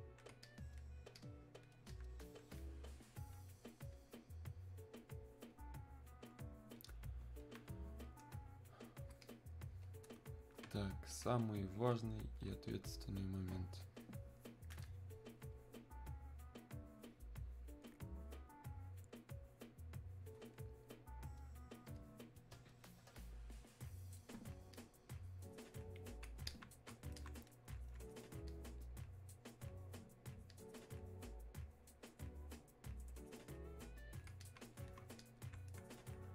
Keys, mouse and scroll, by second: 22.0 click, 24.8-36.3 drag.